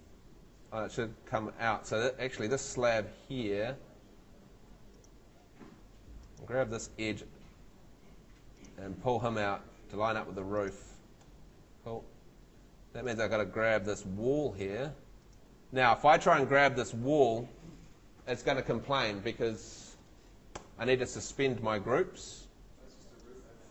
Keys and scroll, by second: 2.0 Escape, 3.9 Tab, 14.2 Tab, 20.5 Escape.